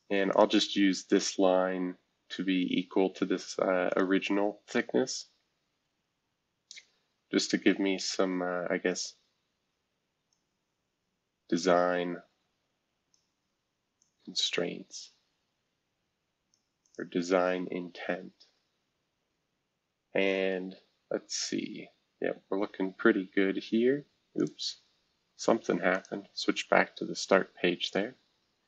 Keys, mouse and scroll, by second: 0.3 click, 1.1 click, 1.5 scroll down 1, 2.1-2.4 scroll down 1, 2.4-3.0 scroll up 5, 3.9 shift+click, 5.9 e, 6.5-7.4 scroll down 3, 7.4 scroll up 1, 8.0 scroll up 1, 9.3-10.1 scroll up 2, 10.1 scroll up 1, 10.3-13.2 drag, 14.0-16.5 drag, 16.8 click, 18.3-19.0 scroll down 4, 21.0-21.6 scroll up 2, 21.6 scroll down 2, 22.0 scroll up 4, 22.9 scroll down 2, 23.5 scroll up 2, 24.4 click, 24.8 scroll down 2, 25.9 click, 27.0 scroll up 3.